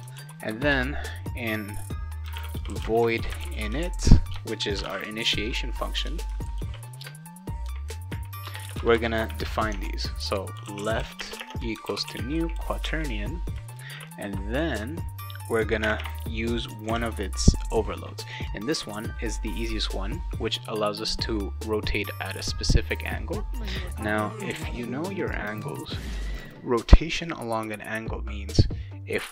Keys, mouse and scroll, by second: 0.0-0.2 typing, 0.4 Return, 0.7 Return, 2.0-6.6 typing, 7.0 Return, 8.4 Return, 8.8 Return, 8.9 Return, 9.7 Tab, 10.3-14.7 typing, 15.9 ,, 24.3 click.